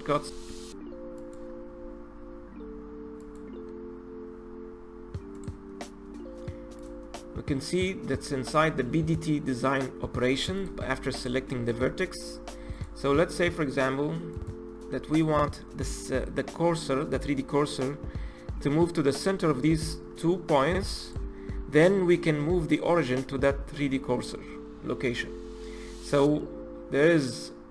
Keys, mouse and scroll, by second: 0.3 Tab, 1.2-9.8 drag, 10.6 click, 11.1 click, 12.8 click, 14.3-17.4 drag, 21.0 shift+click.